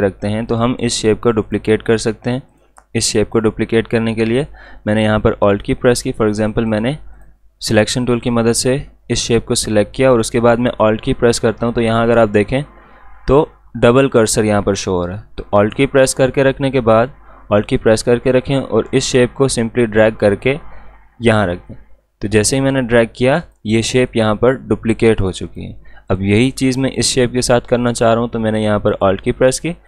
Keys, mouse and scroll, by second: 0.5 click, 6.3 click, 18.4-23.4 alt+drag, 21.3-23.3 drag, 23.4-28.9 drag.